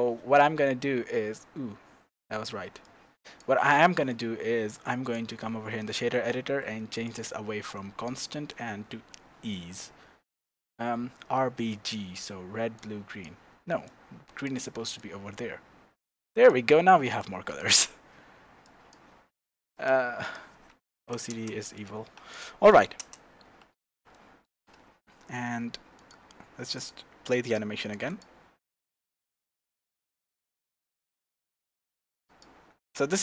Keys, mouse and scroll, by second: 5.4-5.9 scroll up 2, 5.9-7.0 shift+middle drag, 6.4-7.0 scroll up 2, 7.0 scroll up 1, 7.0-11.8 drag, 12.7-21.9 drag, 21.4 KP_Enter, 22.3 click, 23.0 KP_0, 23.4-24.1 scroll up 1, 24.1-25.9 shift+middle drag, 25.9 click, 27.4-32.8 drag.